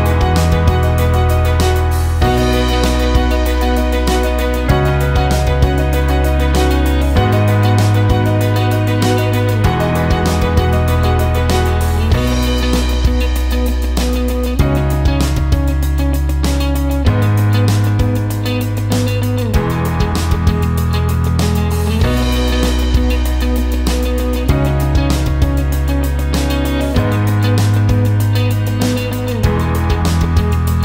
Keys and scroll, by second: 6.6 ctrl+shift+z, 17.1 ctrl+shift+z, 19.5 ctrl+g.